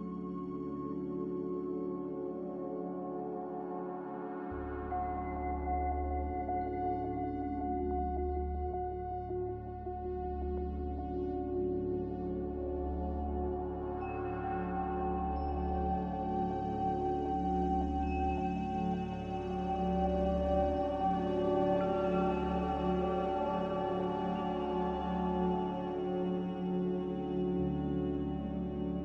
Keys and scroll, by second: 5.4 z, 22.2 a, 24.3 b, 26.1 a.